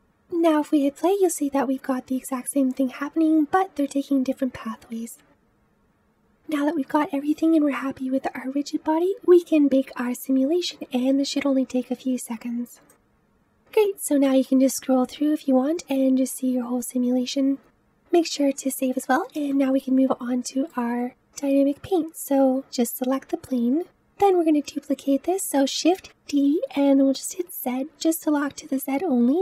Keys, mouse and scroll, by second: 0.4 space, 5.8-7.4 scroll down 2, 12.8 click, 13.7-16.6 drag, 17.8-20.7 middle drag, 20.7-21.3 scroll down 1, 22.5 click, 25.8 shift+d.